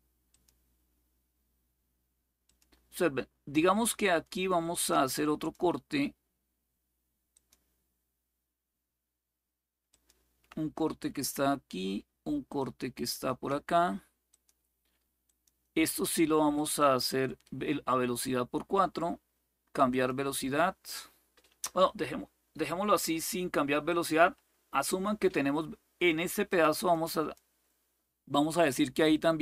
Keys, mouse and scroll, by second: 0.0 click, 2.1 click, 4.4 click, 5.1 click, 7.0 click, 9.6 click, 12.3 click, 14.0 click, 15.0 click, 19.6 click, 23.6 click, 26.2 click.